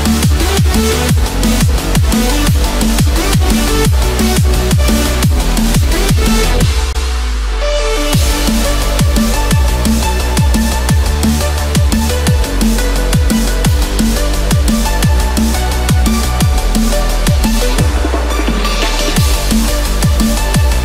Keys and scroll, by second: 3.7 Escape, 7.5 Return, 8.0 Escape, 11.5 Return, 12.1 Escape, 14.9 Return, 16.2 ctrl+-, 16.5 ctrl+0.